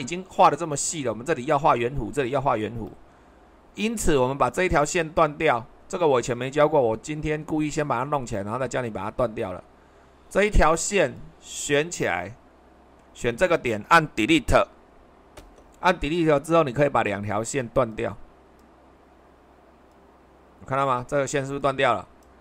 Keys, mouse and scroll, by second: 2.6 super+2, 15.4 Delete.